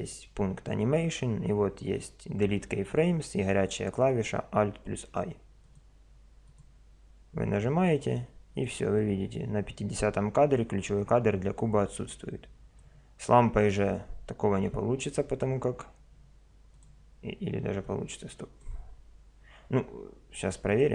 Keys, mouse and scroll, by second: 8.0-10.8 drag, 13.6 right click, 15.2 drag, 15.4 right click, 16.7-19.8 drag.